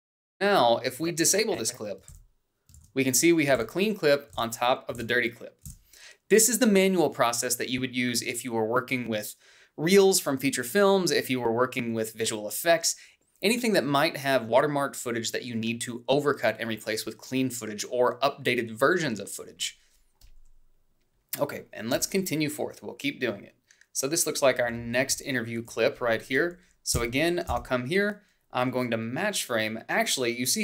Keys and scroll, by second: 3.6 ctrl+b, 5.9 ctrl+b, 23.7 h, 26.5 a, 26.8 h, 28.7 Down.